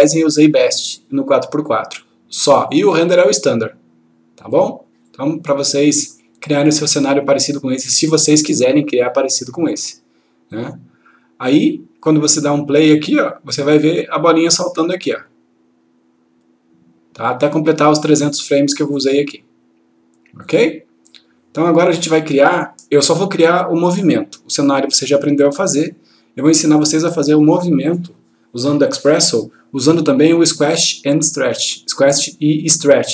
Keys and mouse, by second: 4.5-11.7 drag.